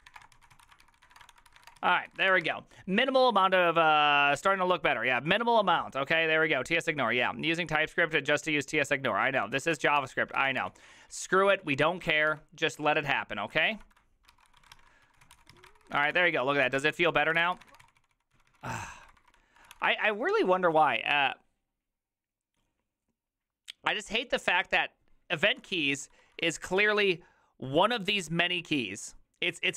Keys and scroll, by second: 0.0-2.2 typing, 1.8 Return, 1.8 ctrl+u, 2.1 ctrl+c, 2.2 ctrl+:, 2.3 Return, 2.4 alt++, 9.6-20.2 typing, 25.5-27.3 typing.